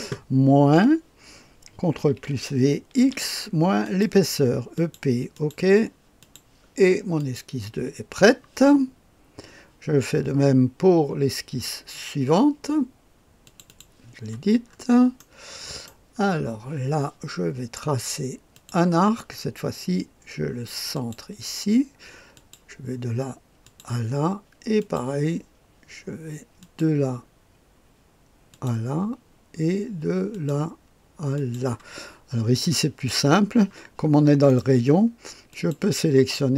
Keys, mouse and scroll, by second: 0.7 typing, 2.1 ctrl+v, 3.0 x, 3.9 click, 4.8 click, 5.4 click, 6.2 click, 7.2 click, 13.5 click, 13.7 click, 15.2-16.3 middle drag, 18.6 click, 21.0 click, 22.4 click, 23.6 click, 24.8 click, 26.6 click, 28.5 click, 30.3 click, 31.4 click, 32.8 middle click, 32.8-33.2 scroll up 2, 33.2 right click, 34.5 right click, 35.5 click.